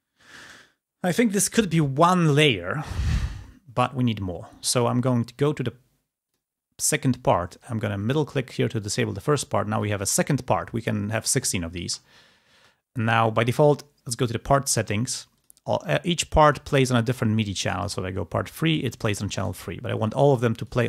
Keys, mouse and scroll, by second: 7.4-9.6 drag, 11.7 space, 20.2-20.8 drag.